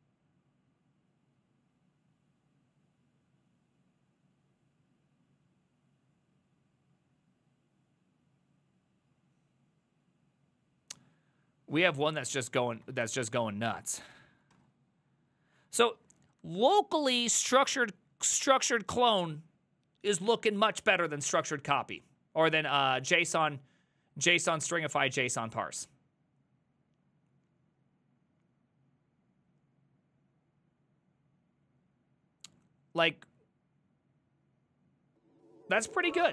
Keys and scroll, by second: 12.7 ctrl+a, 12.9 [, 13.1 ctrl+u, 13.3 ctrl+u, 14.6 shift+a.